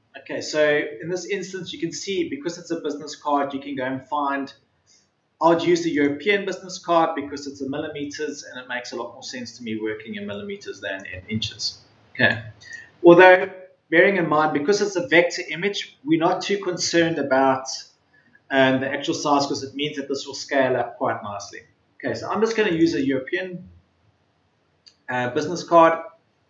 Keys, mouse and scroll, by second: 2.8-3.3 scroll up 1, 4.5-4.9 scroll down 1, 5.9 click.